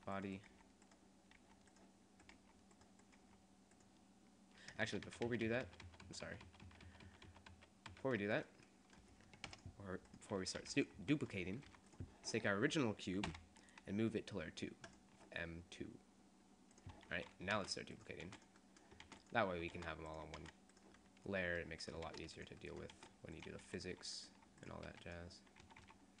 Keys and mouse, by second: 0.5 g, 1.5 g, 2.5 g, 3.3 g, 3.9-4.9 drag, 4.9-7.9 ctrl+z, 9.6 Delete, 10.2 right click, 10.8 g, 11.2 click, 11.8 g, 13.4 m, 17.8-20.6 typing, 22.2 shift+d, 23.2 shift+d, 23.8 s, 24.9 r, 25.7 a, 25.9 a.